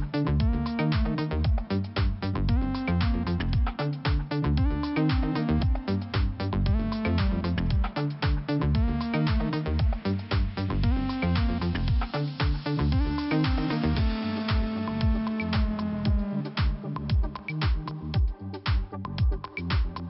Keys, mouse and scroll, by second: 0.5 click, 2.7 scroll up 1, 4.1 click, 4.1 click, 5.0 click, 6.0 click, 7.2 scroll down 1, 8.5 click, 10.4 click, 11.1 click, 11.9 click, 12.8 click, 12.9 click, 13.8 click, 14.7 click, 16.1 click, 17.0 click, 17.9 click, 18.4 click.